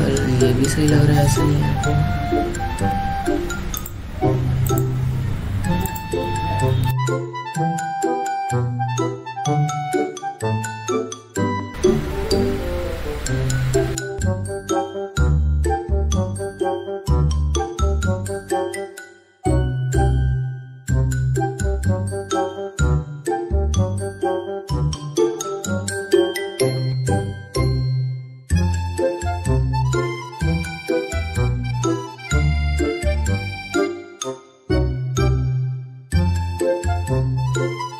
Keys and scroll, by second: 7.2 ctrl+j, 8.0 F7, 10.0 alt+space, 15.3 alt+space, 19.4 alt+space, 23.7 ctrl+t, 29.4 ctrl+alt+z, 32.0 ctrl+z, 32.8 ctrl+shift+x.